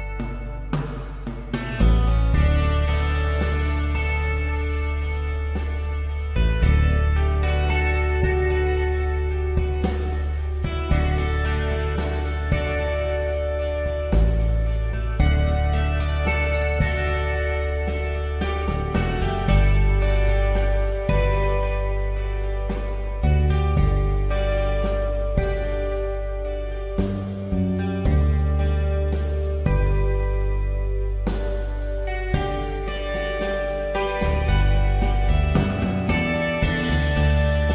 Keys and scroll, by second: 3.2 ctrl+t, 6.5 space, 9.1 Return, 10.9 Escape, 28.4 ctrl+z, 30.7 space.